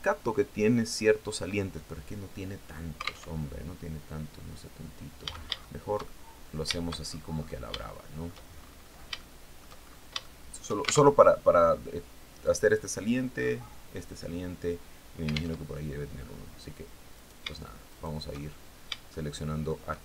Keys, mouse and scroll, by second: 2.7 alt+Tab, 4.6 a, 5.0-6.2 shift+middle drag, 6.5-7.1 shift+scroll down 3, 7.3 shift+middle click, 8.0-8.5 shift+scroll up 1, 8.6 shift+middle click, 9.6 shift+middle click, 9.8 shift+scroll up 1, 10.5 alt+shift+Tab, 15.0 alt+Tab, 16.6 shift+right click, 17.3 shift+right click, 17.8 shift+middle click, 18.5 shift+middle click.